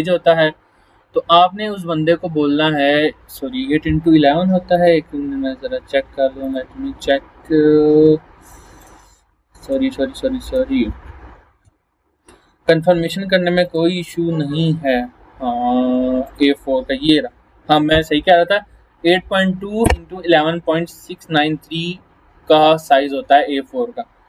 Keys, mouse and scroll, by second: 4.8 click, 8.8 click, 13.6 click, 16.3 click.